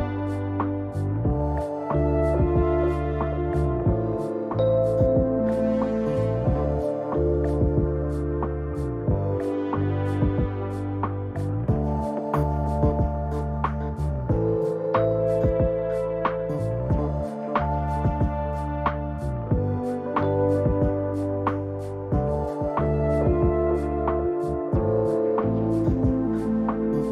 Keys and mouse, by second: 3.6 ctrl+z, 5.6 ctrl+z, 6.8 ctrl+z, 7.6 Escape, 8.9-12.0 drag, 12.2-17.2 drag, 15.2 n, 17.2 n, 18.7-25.4 drag, 21.7 n, 24.0 n.